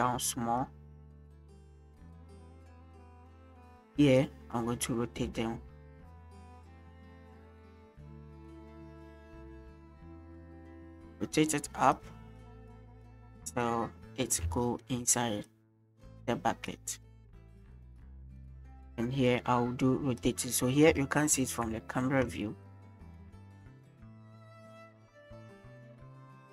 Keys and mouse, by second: 1.1 middle click, 1.7-3.0 drag, 3.4 shift+middle click, 4.2 click, 8.1-9.4 drag, 9.6-9.9 shift+middle drag, 10.7 click, 12.6-14.4 drag, 14.6-14.9 shift+drag, 17.4-18.5 drag, 21.8 ctrl+s.